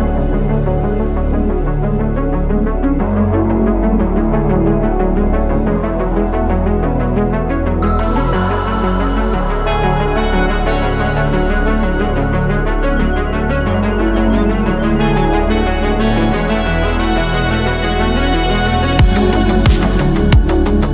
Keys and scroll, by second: 0.3 ctrl+z, 1.3 ctrl+z, 2.8 ctrl+z, 5.7 ctrl+z, 6.1 ctrl+z, 8.6 ctrl+z, 9.2 ctrl+z, 9.4 ctrl+z, 9.9 ctrl+z, 10.3 ctrl+z, 10.8 ctrl+z, 15.5 ctrl+z, 16.8 ctrl+z, 17.4 ctrl+z, 17.8 ctrl+z, 18.2 ctrl+z, 19.2 ctrl+z.